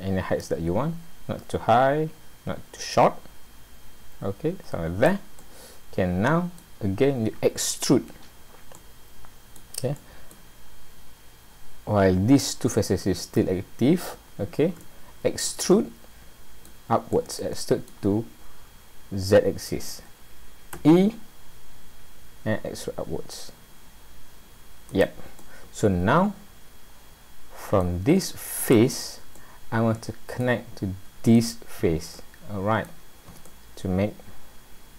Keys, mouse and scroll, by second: 5.4 middle click, 8.8 middle click, 10.0 middle click, 11.0-11.4 scroll up 3, 14.3 scroll down 2, 14.9 shift+middle click, 15.8 middle click, 17.1 middle click, 20.7 e, 25.4 middle click, 28.6 click, 29.4 middle click, 31.4 click, 32.1 middle click, 33.4 middle click.